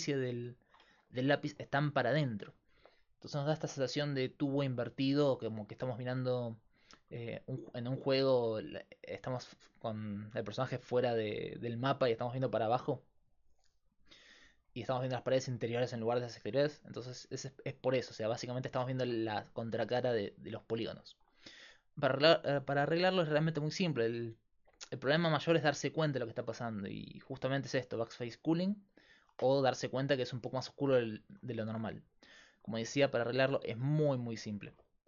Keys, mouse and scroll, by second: 21.5-25.0 right drag, 28.6-32.1 drag, 28.6-32.1 right drag.